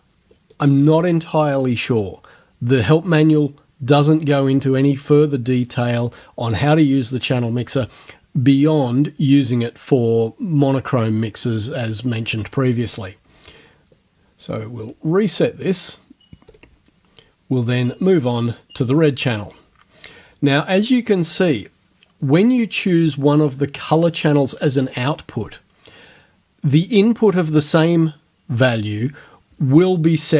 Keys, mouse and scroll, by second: 0.5 right click, 14.8 click, 16.5 click, 17.7 click, 18.9 click.